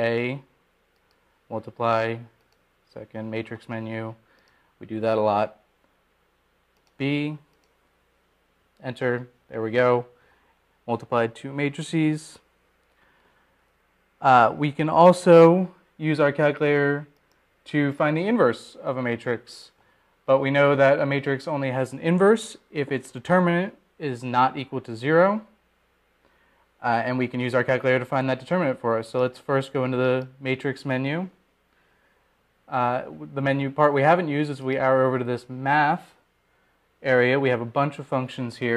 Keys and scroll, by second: 0.2 Return, 5.0-5.8 typing, 7.3 Down, 9.6 Return, 10.2 Return, 37.4 Right.